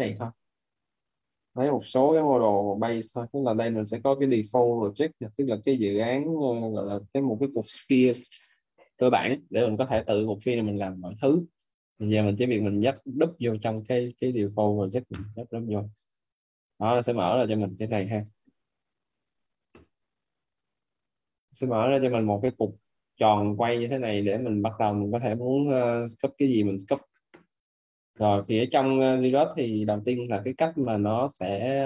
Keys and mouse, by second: 12.7 click, 14.9 click, 17.6 alt+right click, 21.5 click, 23.8 click, 25.8 click, 29.3 click.